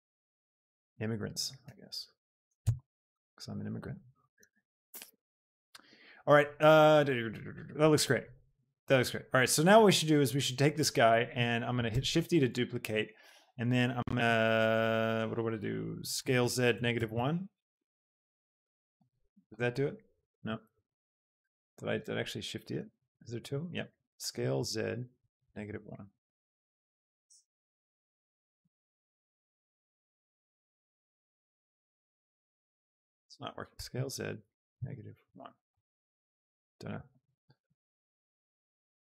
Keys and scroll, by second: 1.7 s, 4.3 Tab, 12.0 shift+d, 12.4 Escape, 16.4 z, 16.8 KP_Subtract, 17.1 Return, 17.9 g, 18.2 z, 20.8 ctrl+z, 22.6 shift+g, 23.4 Escape, 24.1 s, 24.5 z, 25.6 End, 27.4 Return, 28.5 g, 31.1 s, 31.5 z, 32.9 Escape, 33.7 s, 34.0 z, 34.8 KP_Subtract, 35.1 End, 35.9 Return.